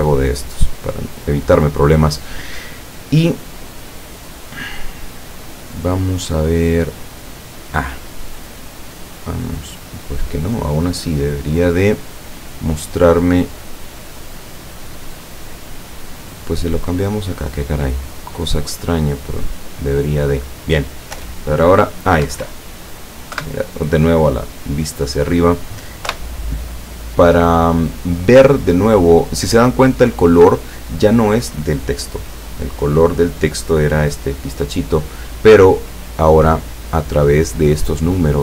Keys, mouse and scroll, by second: 0.5 click, 6.9 click, 8.3 click, 9.4-11.6 middle drag, 11.9 middle click, 14.0 click, 14.7 click, 16.2 click, 17.2-18.4 drag, 18.7-20.0 drag, 21.2 p, 22.3 Escape, 23.4 KP_7, 24.3-24.7 scroll up 2, 25.0 scroll down 2, 26.2 p, 30.5 Escape, 32.2 right click, 33.8 click.